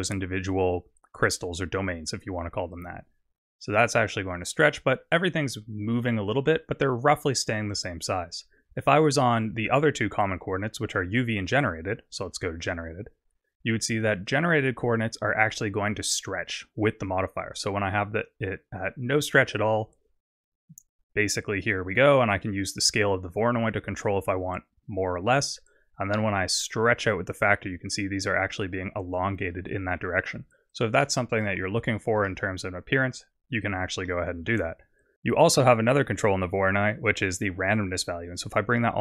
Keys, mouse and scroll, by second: 2.7 click, 11.5 click, 16.2 click, 22.0 click, 26.5 click, 30.7 click, 34.1 middle click, 37.7 click.